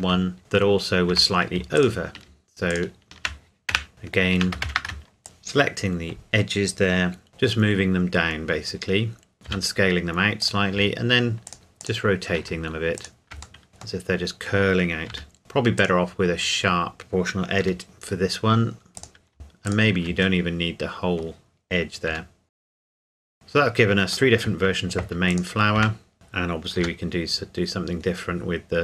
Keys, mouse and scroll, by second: 0.0 Tab, 0.4 middle click, 0.8-1.1 scroll up 1, 1.1 Tab, 1.8 alt+click, 3.7 a, 3.8 Caps_Lock, 3.9 alt+shift+click, 4.7 ctrl+z, 5.2 middle click, 6.3-7.3 scroll down 1, 7.3 g, 7.4-9.3 scroll up 1, 9.3 click, 9.5 s, 10.4 click, 11.5 alt+click, 11.5 r, 11.8 click, 13.0 alt+click, 13.6 middle click, 14.3 middle click, 15.1 r, 15.4 Escape, 15.8 click, 17.6 r, 18.2-19.0 scroll up 1, 19.0 click, 19.7 alt+click, 20.4 middle click, 22.1-23.2 typing, 22.5 right click, 22.5 middle click, 22.9 middle click, 23.1 middle click, 24.1 middle click, 25.3 click, 25.8 Tab, 26.1 right click, 26.8 g, 27.6-28.8 scroll down 1.